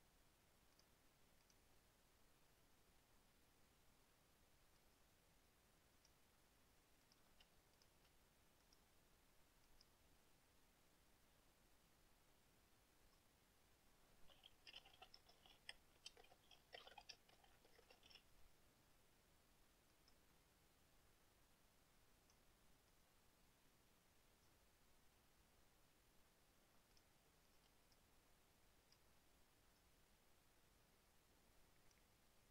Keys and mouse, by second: 1.0 drag, 1.6 click, 4.9 click, 6.1 click, 7.2 click, 8.8 right click, 9.8 click, 13.1 click, 14.7-18.8 typing, 20.1 click, 22.0-22.6 drag, 23.1 click, 24.4 click, 27.1 click, 27.6 shift+click, 28.0 shift+right click, 29.1 click, 29.9 click, 31.2-32.2 drag.